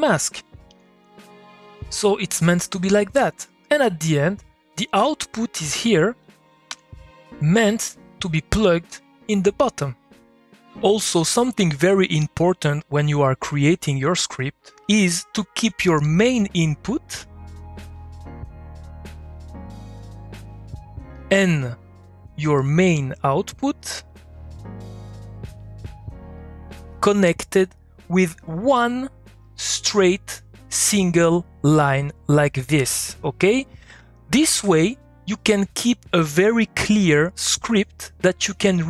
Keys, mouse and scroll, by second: 1.3-4.4 drag, 4.4-6.2 drag, 6.6 ., 7.8-10.5 drag, 16.3 click, 22.7 click, 28.5 click, 32.1 click.